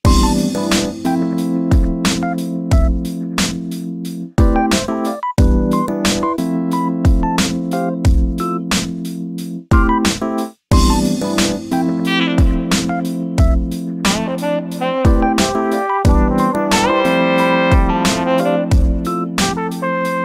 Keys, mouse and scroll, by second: 0.0 drag, 0.3 middle drag, 0.5 scroll up 3, 0.8-2.4 middle drag, 2.4-2.9 scroll down 5, 2.6 shift+middle drag, 2.9 middle click, 3.2 scroll up 1, 3.4 KP_7, 3.8 scroll down 2, 4.0 shift+middle drag, 4.3 scroll up 2, 4.6-5.4 shift+middle drag, 5.4-5.7 scroll up 1, 5.7 shift+middle click, 6.1-6.9 scroll down 2, 6.9-8.2 shift+middle drag, 8.2 z, 9.0 scroll up 1, 10.2 scroll up 1, 10.7-13.6 shift+middle drag, 15.7 click, 16.2 scroll down 2, 16.5 scroll up 1, 16.8 Tab, 17.4 Tab, 18.2 click, 18.5 Tab, 19.0 a.